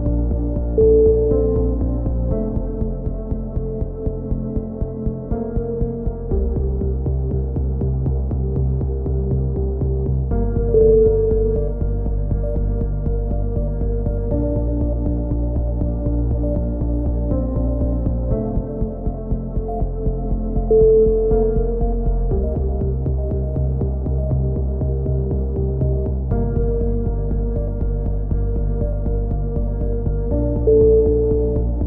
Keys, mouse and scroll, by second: 5.5 KP_3, 5.6 z, 7.6 z, 8.0-9.0 drag, 9.6 middle click, 10.0 right click, 11.2-15.4 drag, 15.4 middle click, 16.3 click, 17.5 a, 18.2-20.3 drag, 21.3 click, 22.5 click, 23.3 a, 23.7 click, 24.1 middle click, 25.6 middle click, 27.0 KP_3, 27.2 z, 29.8 z, 31.4-31.8 drag.